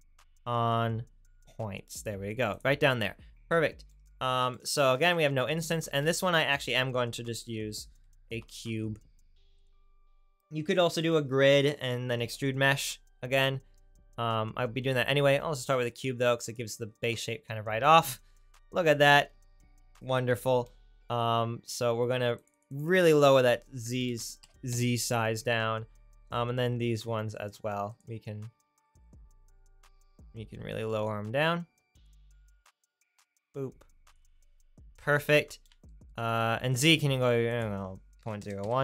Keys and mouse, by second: 2.6-9.0 drag, 5.9 shift+a, 18.6-28.0 drag, 29.2-35.0 drag.